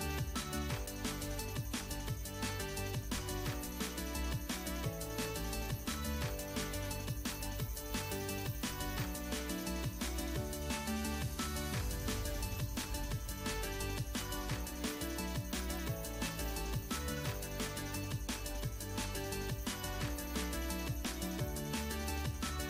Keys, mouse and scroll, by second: 1.6 click, 3.9-5.3 drag, 5.5-6.2 scroll up 2, 7.6-12.8 right drag, 14.8-16.1 drag, 18.2-22.2 right drag, 22.2-22.6 drag.